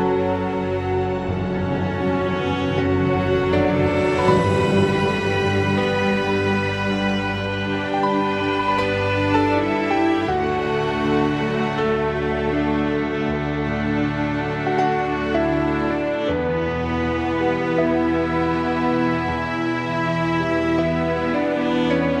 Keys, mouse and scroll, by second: 3.1 click, 4.6 click, 6.7-7.1 scroll down 1, 8.2 r, 13.5 click, 14.5-16.8 middle drag, 18.4-20.8 middle drag, 21.1-22.2 middle drag.